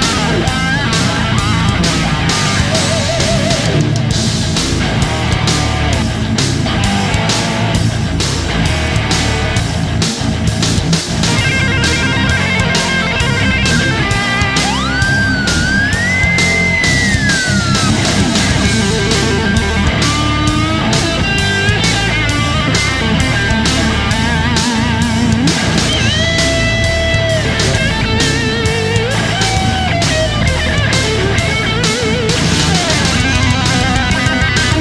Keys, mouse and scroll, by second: 33.0-34.0 alt+drag.